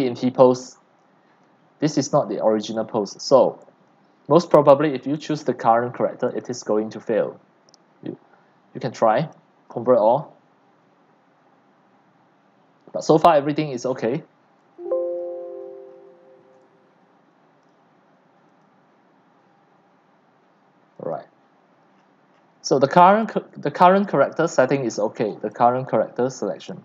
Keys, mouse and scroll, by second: 3.1-3.6 drag, 4.6 drag, 6.3 click, 14.6 c, 15.2 right click, 15.6-16.0 scroll down 4, 16.5-17.3 c, 17.7-18.2 drag, 21.1 click, 21.9-22.7 scroll down 12, 22.7-23.1 drag, 24.3 click, 24.6-25.4 scroll.